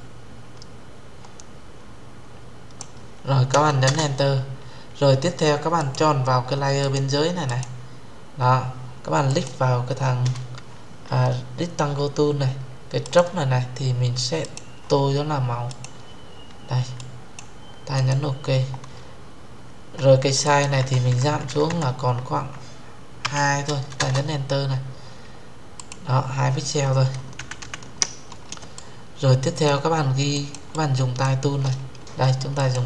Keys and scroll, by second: 3.6 Return, 23.7 Return.